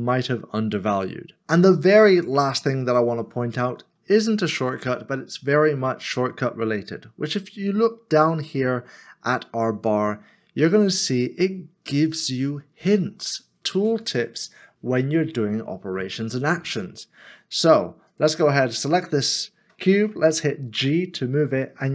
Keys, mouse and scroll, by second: 20.8 g.